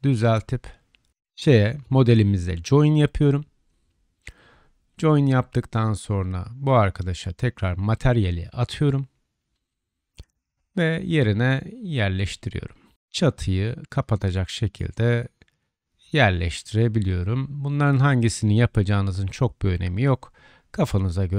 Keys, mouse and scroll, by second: 0.5-6.3 drag, 1.3 ctrl+j, 4.1 Tab, 14.1-15.2 middle drag, 15.9 click, 19.3-20.3 drag, 21.2-21.3 drag.